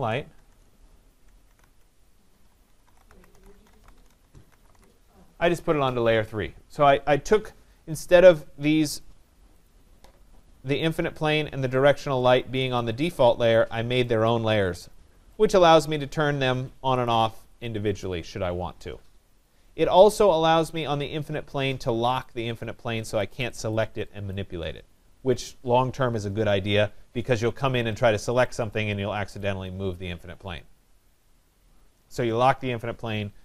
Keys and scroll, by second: 1.1 ctrl+a.